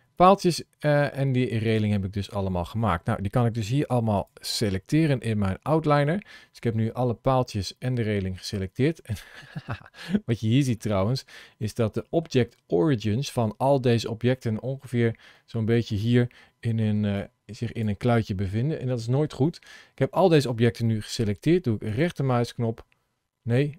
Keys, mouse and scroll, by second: 0.0 click, 1.5 click, 4.0 shift+click, 7.2 middle click, 10.1 scroll up 1, 10.6 shift+middle click, 11.5 shift+middle click, 14.2 middle click, 16.7 ctrl+shift+e, 19.3 middle click, 21.7 right click.